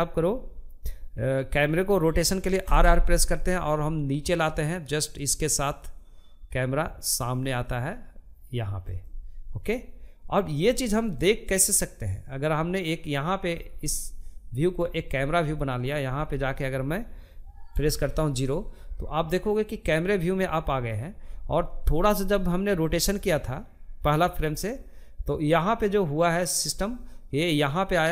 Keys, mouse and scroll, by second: 1.0 r, 10.1-14.0 drag, 14.0-16.1 middle drag, 16.1 KP_0, 18.3-25.7 drag.